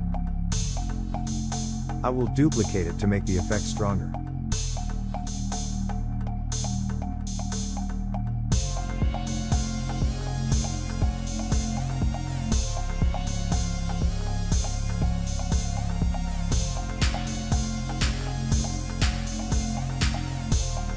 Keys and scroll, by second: 2.6 ctrl+c, 3.9 ctrl+f.